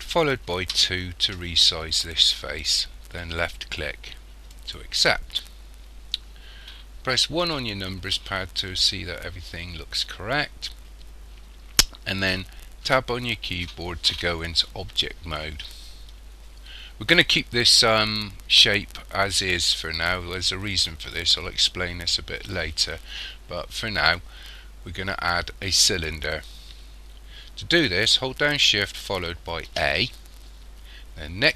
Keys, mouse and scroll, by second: 7.5 KP_1, 12.9 Tab, 29.7 shift+a.